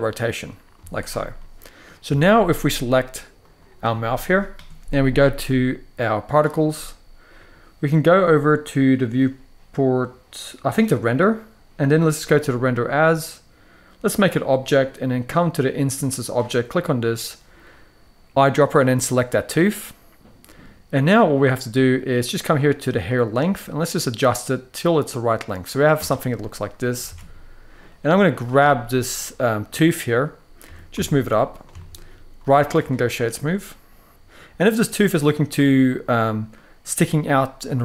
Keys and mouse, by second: 0.1-0.5 middle drag, 0.5 z, 1.1-1.5 middle drag, 1.8 shift+middle drag, 2.1-2.5 middle drag, 10.8 click, 12.4-13.9 drag, 16.1 click, 19.4-20.3 middle drag, 21.8-25.8 drag, 26.1-26.7 middle drag, 26.8 alt+a, 27.0-27.5 middle drag, 28.1 click, 28.3-28.9 middle drag, 29.4-29.8 middle drag, 30.3 g, 30.6 z, 31.2 click, 31.5 shift+middle drag, 32.1-32.6 right drag, 32.9-34.1 middle drag, 34.1 alt+a, 34.1 Tab, 35.1-35.7 middle drag, 36.3 middle drag, 37.7 middle drag.